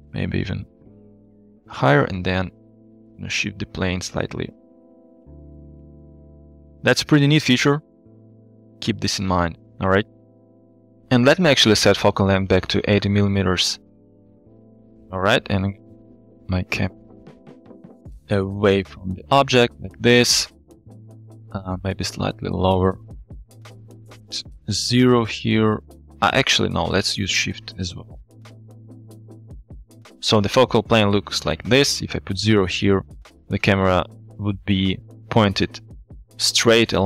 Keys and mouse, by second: 0.0 z, 2.7-4.5 shift+drag, 9.2-9.5 middle drag, 10.0 shift+middle drag, 10.3 middle drag, 12.4-14.0 drag, 15.8 g, 16.0 y, 21.7 g, 21.7 z, 23.0 shift+click, 23.8 click, 24.2 click, 26.6-28.4 shift+drag, 28.4 shift+middle click, 29.2 KP_3, 30.4 shift+middle drag, 32.3 middle click, 34.0 shift+middle drag, 34.1 shift+drag.